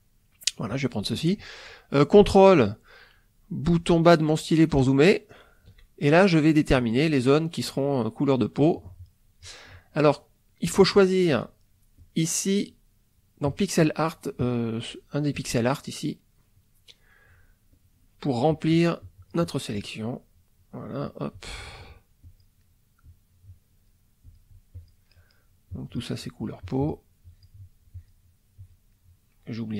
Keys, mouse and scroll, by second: 0.5 middle click, 4.1-5.7 ctrl+middle drag, 6.8-9.6 drag, 10.9 right click, 12.0 click, 13.5 click, 14.4 click, 16.1 right click, 17.7 click, 18.4 click, 19.8 click, 20.8 click, 21.3 click, 22.2 click, 22.6 middle click, 23.5 click, 24.2 click, 24.7 click, 25.1 middle click, 25.7 click, 26.1 right click, 26.6 click, 27.2 click, 27.9 click, 28.6 click, 28.9-29.7 middle drag.